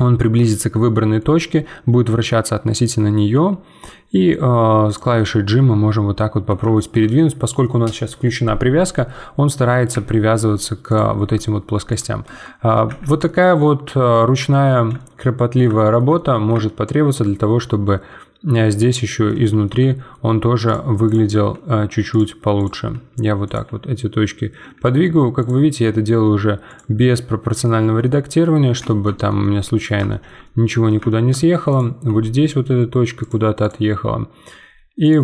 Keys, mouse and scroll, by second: 0.4-1.2 scroll down 11, 1.2-3.3 middle drag, 3.3 g, 5.1-9.9 middle drag, 9.9 z, 10.3 middle click, 10.9 click, 11.1 g, 12.3 Tab, 12.5-12.9 scroll down 1, 12.9 z, 13.2 middle click, 13.7-14.9 scroll down 10, 14.9-19.5 shift+middle drag, 19.5 Tab, 19.6-20.6 middle drag, 20.6 click, 21.5 g, 22.5 click, 22.9 g, 24.6 z, 25.4 click, 25.7 g, 27.1 middle click, 27.7 Tab, 28.0-29.1 middle drag, 29.1 Tab, 29.4-31.7 middle drag, 31.7 click, 32.0 g, 33.6 click, 34.5 g.